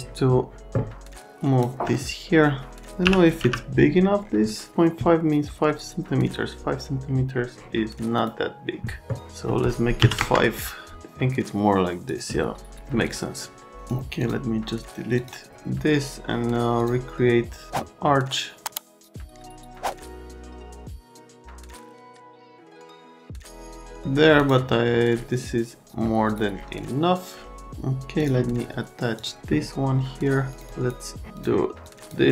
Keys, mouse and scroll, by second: 1.1 click, 1.9-2.8 alt+middle drag, 3.0 l, 3.4 z, 10.0 KP_5, 10.2 KP_Enter, 14.2 click, 15.2 click, 16.8 click, 19.0 click, 19.3 click, 19.9 click, 20.0 alt+middle click, 20.5 alt+right click, 20.8 click, 21.3 click, 21.6 click, 22.0 click, 22.4 click, 22.6 click, 22.9 click, 23.4 right click, 26.3 click, 28.2 click, 29.1 click, 30.5 click, 30.6 click, 31.4 click, 31.8 click.